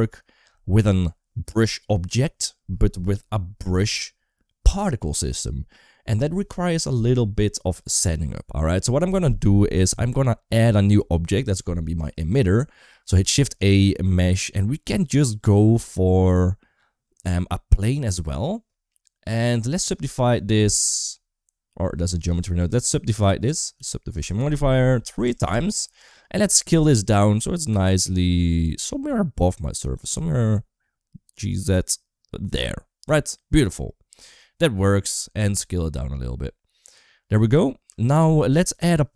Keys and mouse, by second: 13.1 shift+a, 19.2-20.3 drag, 22.0 ctrl+z, 22.4-23.9 drag, 24.9 click, 29.9 g.